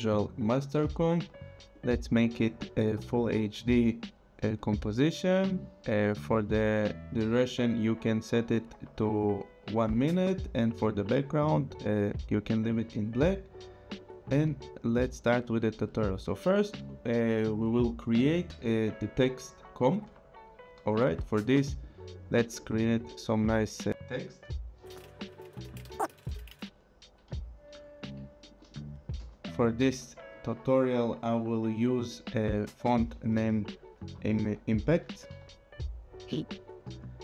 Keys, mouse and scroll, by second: 0.0-0.3 typing, 1.7 click, 4.6 click, 13.9 click, 21.8 click, 23.4 click, 24.6-27.1 typing, 28.4 click, 29.3 shift+Down, 31.0 click, 32.1 click, 34.2 i, 34.5 m, 35.0 p, 35.4 a, 36.9 click.